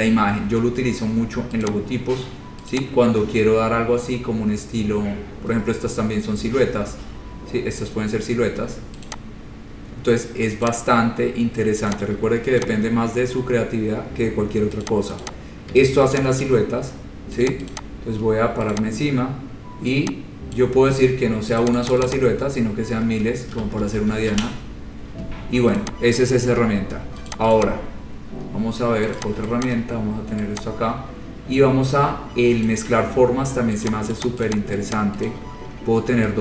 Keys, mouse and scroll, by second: 1.8 click, 3.0 click, 5.8 scroll, 6.6 scroll, 6.7 scroll down 5, 8.0 scroll up 2, 8.3 scroll, 9.3 click, 10.0 scroll, 10.9 click, 11.4-12.1 scroll, 12.1 click, 12.8 shift+click, 13.8-14.5 scroll, 15.1 click, 15.5 click, 15.6 shift+click, 16.4 shift+click, 16.8 scroll down 3, 17.7 click, 18.0 click, 19.0 click, 20.8 click, 21.8 click, 22.0 click, 22.1 click, 22.2 click, 22.6-23.3 scroll, 23.8 ctrl+z, 24.0 ctrl+z, 24.2 ctrl+z, 24.2 ctrl+z, 24.5 ctrl+z, 24.9 scroll, 26.0 click, 26.7 Delete, 27.5 click, 27.8 click, 29.2 middle click, 29.4 click, 29.8 ctrl+click, 30.2 ctrl+click, 32.9 click, 34.0 click, 34.4 click, 34.6 ctrl+click, 34.6 click, 34.8 ctrl+click, 35.5 click, 35.5 right click.